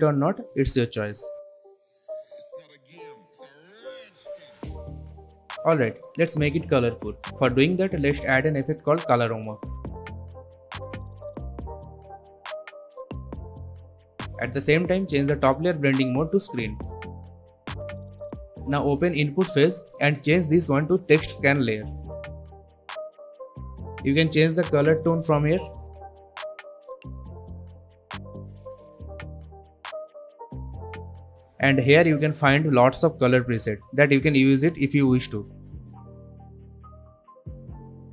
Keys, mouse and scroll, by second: 5.2 click, 7.7-9.5 typing, 10.7 click, 13.4 click, 19.1 click, 24.7-27.7 drag, 32.2-33.2 scroll down 1, 33.2 click.